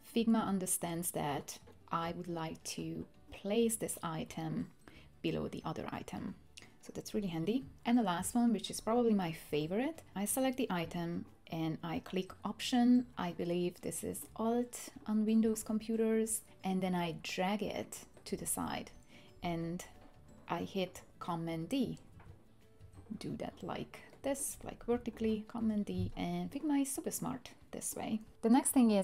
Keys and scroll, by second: 22.1 super+d, 22.8 super+d, 25.2 super+d, 25.6 super+d.